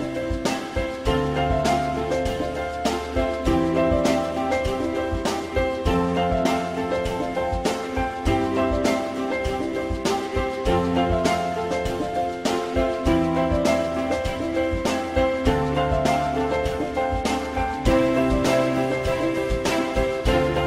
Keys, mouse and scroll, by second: 6.4 alt+middle click, 12.5 alt+F4, 12.7 alt+middle click, 15.2 alt+middle click.